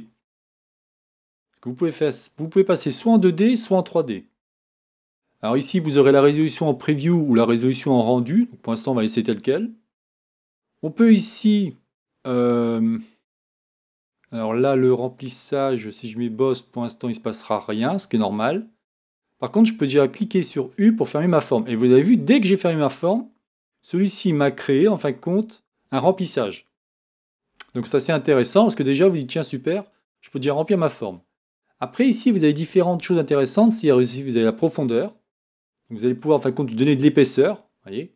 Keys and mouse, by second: 1.1 Tab.